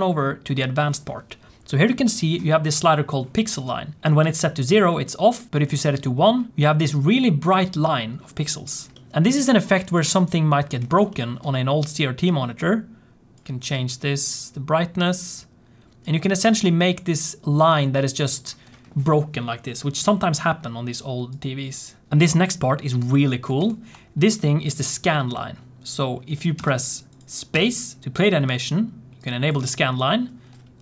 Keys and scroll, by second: 23.6 ctrl+s, 24.7 space, 26.5 space, 27.4 space.